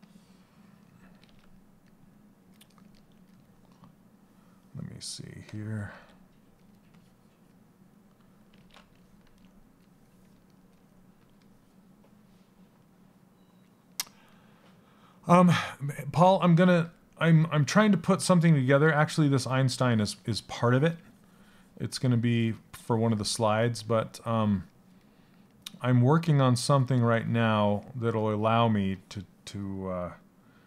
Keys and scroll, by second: 5.4 s, 18.8 s.